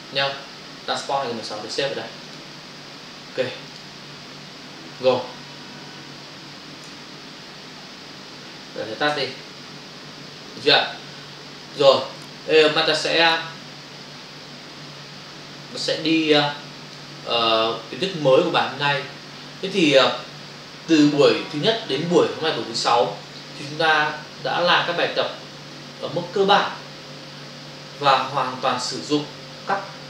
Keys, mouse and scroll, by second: 2.2 click, 3.7 click, 9.1 ctrl+alt+w, 10.5 click, 11.6 click, 13.1 click, 13.4 double click, 15.8 click.